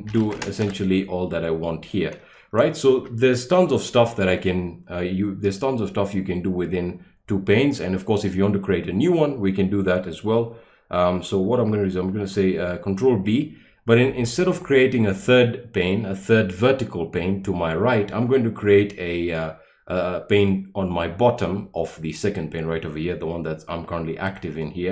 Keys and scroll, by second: 0.0-1.0 typing, 3.0 BackSpace.